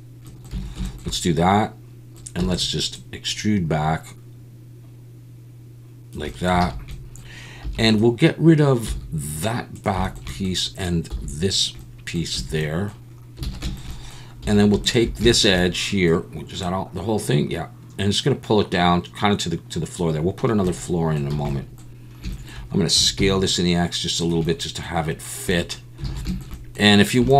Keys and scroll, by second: 0.5 a, 2.4 e, 6.6 alt+a, 7.6 3, 8.9 x, 11.1 x, 12.3 a, 13.5 alt+a, 14.4 2, 21.3 a, 22.9 s, 23.2 x, 26.1 alt+a.